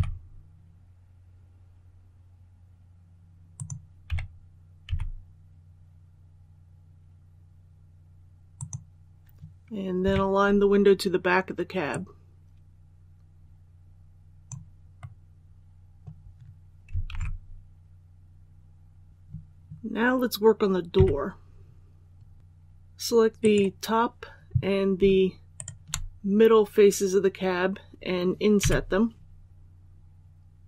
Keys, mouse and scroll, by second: 3.2-4.7 typing, 8.4 click, 9.9 KP_3, 11.8-14.6 drag, 14.9 middle click, 17.0 alt+a, 19.1 click, 20.8 KP_3, 22.3 alt+a, 23.3 right click, 25.4 shift+right click, 28.5 i.